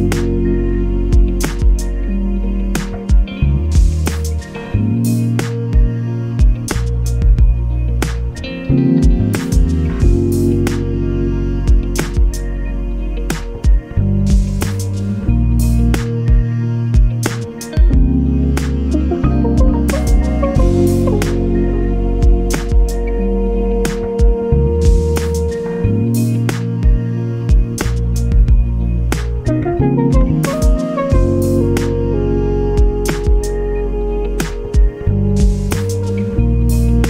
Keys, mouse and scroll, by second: 1.1 ctrl+shift+click, 4.5 ctrl+shift+click, 5.7 ctrl+shift+click, 7.2-7.5 ctrl+scroll down 2, 8.1-8.5 ctrl+scroll up 2, 10.2 ctrl+d, 11.2-12.3 drag, 12.4 ctrl+y, 13.4 ctrl+d, 13.9 ctrl+click, 17.7 click, 19.9-21.4 ctrl+shift+drag, 22.7 click, 23.9-26.8 ctrl+drag, 27.5 ctrl+shift+click, 29.1 ctrl+*, 31.9 click, 32.7 click, 33.7 click, 35.9 5.